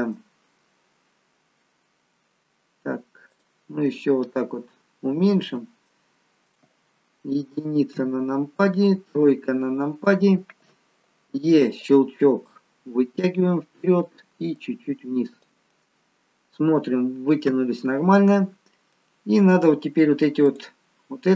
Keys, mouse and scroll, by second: 3.2 shift+click, 3.8 middle click, 5.3 shift+click, 5.8 middle click, 7.8 KP_1, 9.2 KP_3, 11.2 e, 12.5 click, 14.6 click, 15.6 middle click, 19.0 middle click, 19.0-20.4 scroll up 1, 20.4 click.